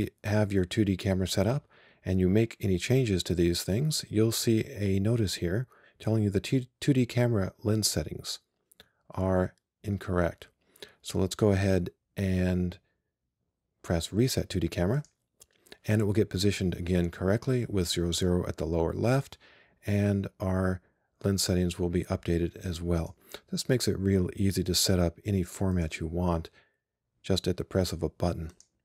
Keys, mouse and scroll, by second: 15.0 click, 23.1-26.7 drag.